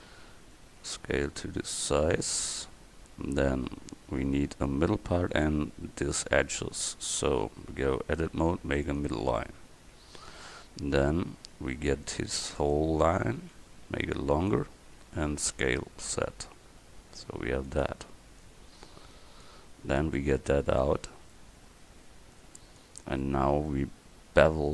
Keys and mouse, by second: 0.7 s, 7.3 Tab, 8.4 ctrl+r, 10.4 a, 12.0 c, 13.2-15.1 drag, 15.7 s, 18.5-22.8 drag, 20.2-22.1 right drag.